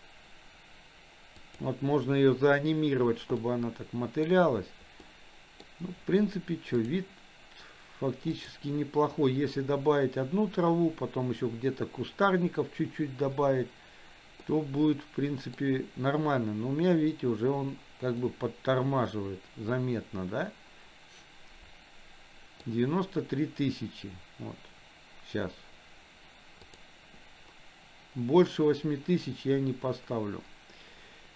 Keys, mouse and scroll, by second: 3.5-4.5 middle drag, 5.2 middle click, 7.0 click, 8.6 click, 14.7-15.9 middle drag, 18.3-23.1 middle drag, 26.6 click.